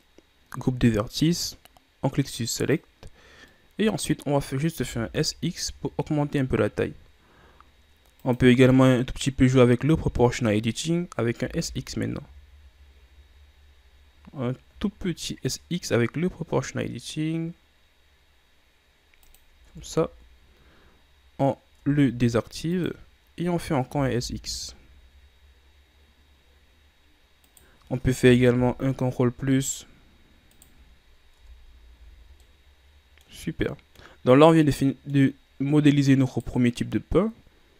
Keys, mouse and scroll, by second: 2.8 click, 3.7 middle click, 4.4-4.9 scroll up 1, 4.9 s, 10.0 o, 11.6 s, 19.8 Tab, 21.9 Tab, 22.9 click, 24.0 s, 28.7 ctrl+KP_Add, 30.7 right click, 31.6 Tab, 32.1 a, 32.4 scroll down 1, 32.6-35.6 middle drag, 35.6-36.4 scroll up 2, 36.4 right click.